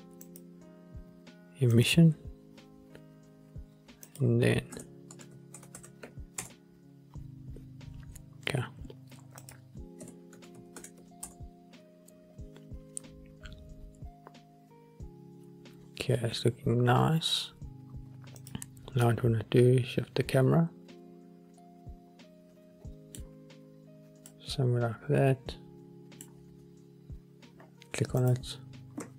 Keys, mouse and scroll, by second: 0.4 click, 4.2-6.5 drag, 5.9 KP_0, 9.5-11.4 drag, 18.6 drag, 19.2-23.6 middle drag, 24.4-26.4 middle drag, 24.4-24.9 scroll up 1, 27.7-28.3 scroll up 1, 28.3 click, 28.3 scroll up 1.